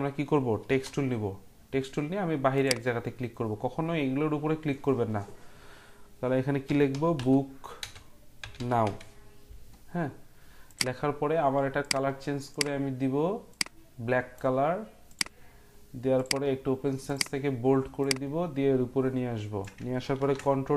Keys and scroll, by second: 0.8 t, 6.4-9.3 typing, 20.1 ctrl+t.